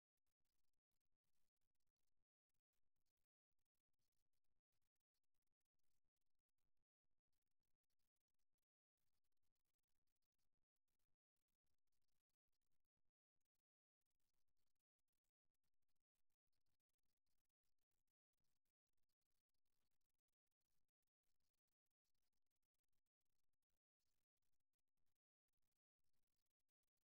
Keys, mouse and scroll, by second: 0.0-1.3 drag, 1.3-4.4 middle drag, 6.1-7.4 middle drag, 7.4-9.2 right drag, 8.5 f, 9.4 right click, 9.7 f, 10.9 right click, 11.2 f, 12.6 f, 13.5 f, 14.5 f, 16.2 f, 17.0 f, 18.5 f, 19.8 f.